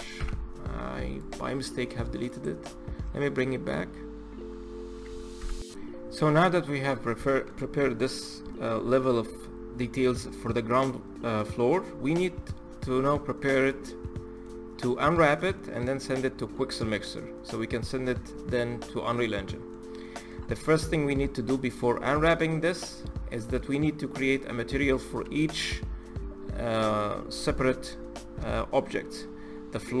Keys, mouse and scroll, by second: 0.9 click, 1.3-1.6 scroll down 2, 1.6 middle click, 2.0 click, 6.1-7.4 middle drag, 7.4-7.7 scroll up 4, 7.7-11.7 middle drag, 12.2-12.6 scroll down 2, 12.6-18.5 middle drag, 19.8-25.2 middle drag, 28.9-30.0 scroll up 3.